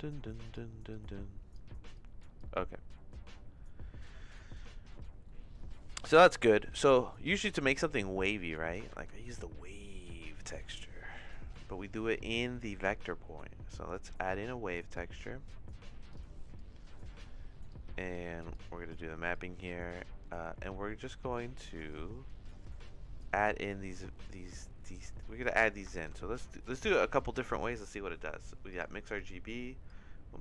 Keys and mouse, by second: 0.9 click, 1.9 click, 2.4 click, 5.2 middle click, 6.9 middle click, 7.5 click, 7.9 click, 8.9 shift+a, 16.5 click, 17.7 click, 18.5 click, 19.3 click, 20.4 middle click, 21.0 middle click, 21.9 click, 22.6 click, 23.6 click, 24.4 click, 24.8 click, 25.4 click, 25.9 shift+a, 29.8 click.